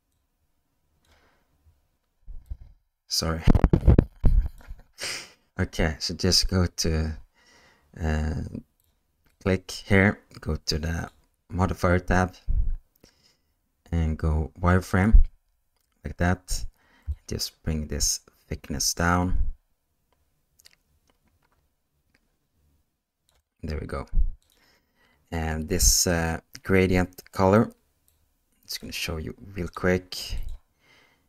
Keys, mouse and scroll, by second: 0.1 click, 2.4-4.6 drag, 11.0-15.6 drag, 17.2-23.3 shift+drag, 24.4 click, 28.1 click, 29.6 click, 30.4 click.